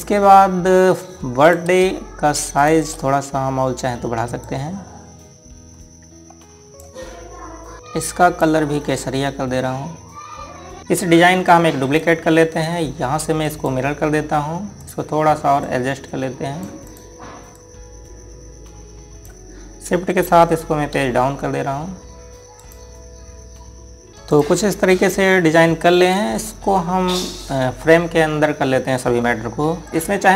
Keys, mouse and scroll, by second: 0.2 click, 1.0 scroll up 1, 2.2 click, 3.3 shift+click, 5.2 click, 7.8 click, 10.8 Delete, 12.3 click, 12.6 right click, 14.2 click, 21.7 shift+Page_Down, 23.4 click, 24.3 scroll down 1, 25.1 click, 27.2 scroll down 1.